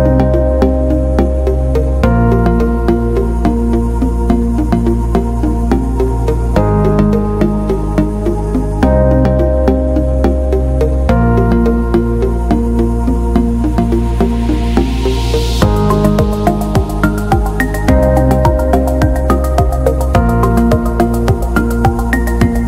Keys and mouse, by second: 1.7 alt+right click, 2.1 middle click, 2.5 g, 3.9 KP_1, 4.7 g, 5.7 middle click, 6.6 middle click, 7.9 middle click, 9.9 ctrl+r, 11.0 middle click, 11.8 alt+right click, 12.1 g, 13.1 middle click, 13.7 g, 15.3 alt+right click, 16.6 alt+right click, 16.8 g, 17.6 KP_1, 18.9 alt+z, 19.9 alt+right click, 20.4 alt+z, 20.8 s, 21.9 g.